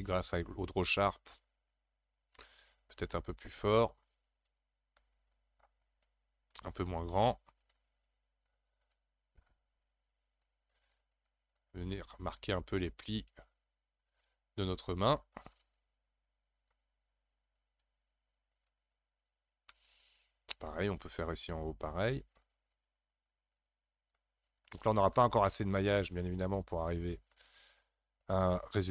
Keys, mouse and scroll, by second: 6.9 ctrl+z, 7.9 f, 8.9 f, 9.5-11.9 drag, 11.9-13.0 scroll down 2, 13.0-19.7 drag, 19.7-22.3 middle drag, 22.3-27.2 drag, 27.2-28.9 scroll up 2.